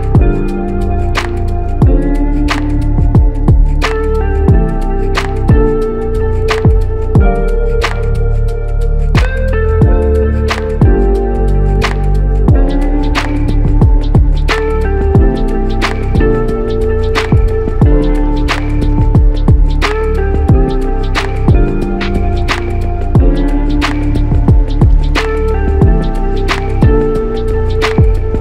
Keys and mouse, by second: 0.5 ctrl+z, 0.9 ctrl+z, 1.2 ctrl+z, 1.4 ctrl+z, 3.2 double click, 7.3 double click, 10.8 double click, 11.7 ctrl+alt+click, 13.1 alt+shift+click, 16.2 ctrl+alt+click, 17.9 double click, 24.9 ctrl+alt+click, 26.0 alt+click.